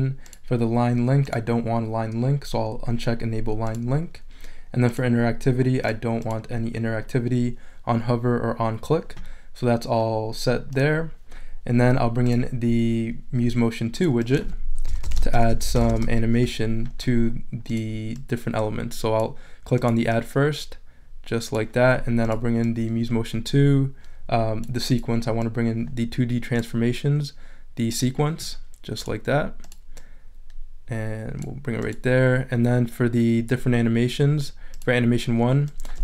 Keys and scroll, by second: 14.6-16.8 typing.